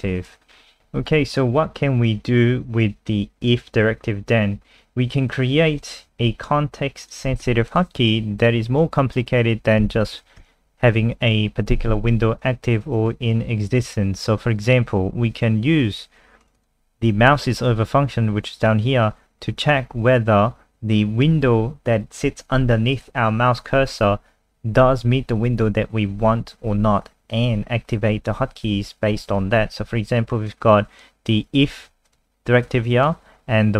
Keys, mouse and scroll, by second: 0.5 scroll down 3, 0.8 ctrl+alt+r, 1.3 click, 7.3 ctrl+c, 7.7 click, 9.9 ctrl+v, 10.4 ctrl+s, 16.4 click, 16.6 click, 30.5 click, 31.8 ctrl+z, 32.1 click, 32.7 click.